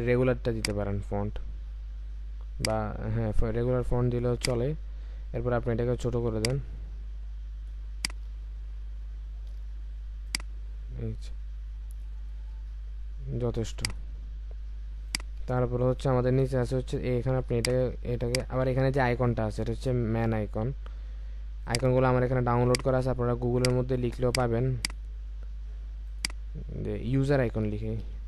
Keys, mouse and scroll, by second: 8.9 typing, 10.3 typing, 15.5-16.3 alt+scroll down 1, 17.7 shift+click, 19.5-19.9 alt+scroll up 1, 28.0-28.2 typing.